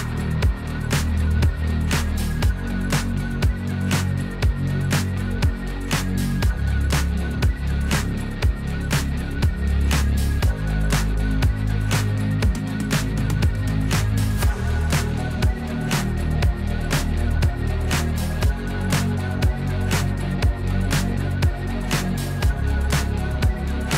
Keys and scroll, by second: 6.8 m, 9.8 \, 15.1 F2, 16.2 F2, 17.9 F2.